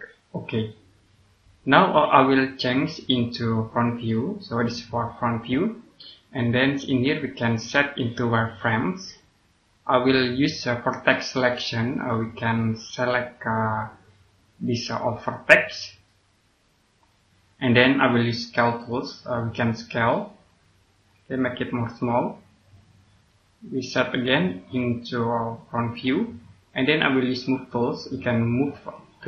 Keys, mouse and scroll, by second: 8.3 click, 11.2 click, 12.1 scroll up 1, 14.8 right click, 16.5 click.